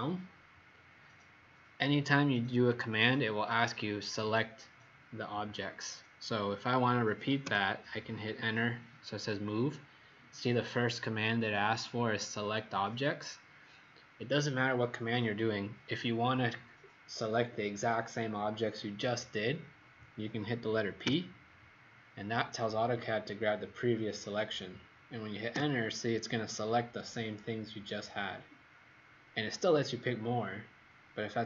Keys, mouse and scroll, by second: 7.4 Return, 21.0 p, 25.5 Return.